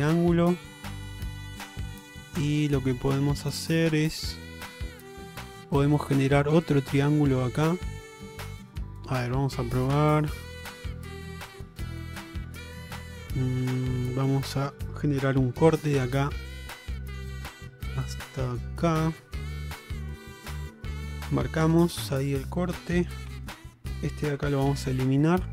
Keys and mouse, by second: 5.2 middle click, 6.1 middle click, 8.6 middle click, 9.0 shift+middle click, 10.9-12.7 middle drag, 13.0 shift+middle click, 15.4 k, 23.4 2, 24.8 ctrl+x, 25.3-25.5 middle drag.